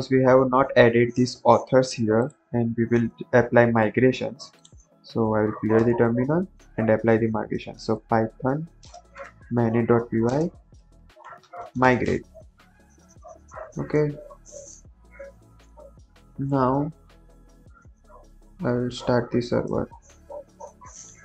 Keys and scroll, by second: 2.7 ctrl+`, 3.7 ctrl+c, 4.9-6.0 typing, 7.2-12.2 typing, 16.4 Up, 17.5 Up, 18.7 Up, 19.8 Return.